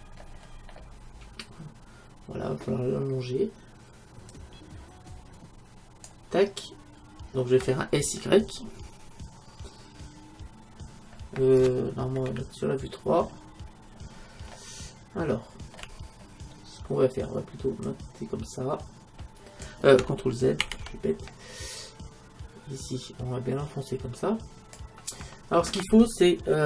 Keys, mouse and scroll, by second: 0.2-2.6 middle drag, 4.3-6.2 drag, 7.1-12.7 middle drag, 12.3 KP_3, 14.2-15.5 middle drag, 16.2 middle click, 17.9-19.6 drag, 20.8 ctrl+z, 21.8-23.5 drag.